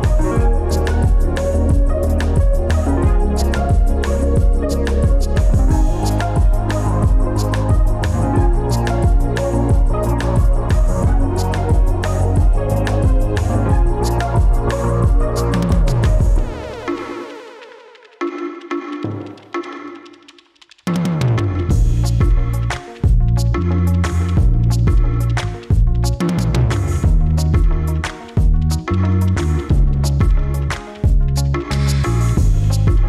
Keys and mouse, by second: 1.0 click, 4.1 click, 6.1-7.9 drag, 11.2 click, 12.0 click, 13.6 ctrl+z, 17.0-23.2 drag.